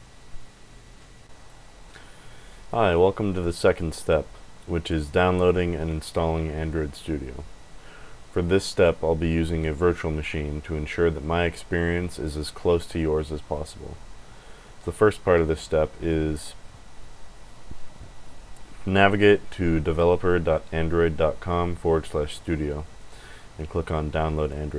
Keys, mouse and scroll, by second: 1.2 click, 1.3 click, 22.9 click, 24.4 click.